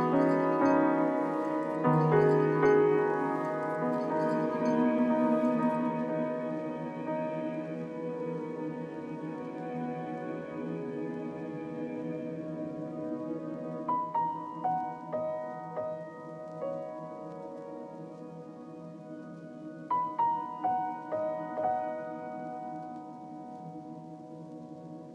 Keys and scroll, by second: 4.5 z, 7.0 z, 9.7 b.